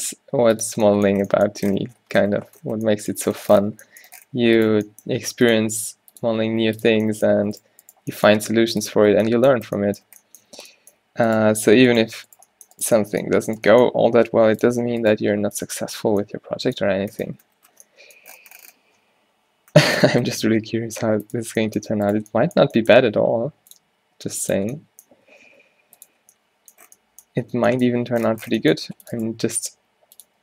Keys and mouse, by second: 0.2 g, 0.8 Tab, 3.9 Tab, 5.2 g, 5.7 r, 6.6 r, 7.2 Tab, 7.4 Tab, 10.6 r, 12.6 click, 14.1 click, 14.1 g, 15.2 click, 15.2 g, 15.8 Tab, 20.5 Tab, 21.3 click, 22.1 middle click, 23.1 click, 23.3 e, 24.1 g, 25.2 s, 27.7 Tab, 28.1 Tab, 29.2 ctrl+r, 29.5 s, 30.3 g.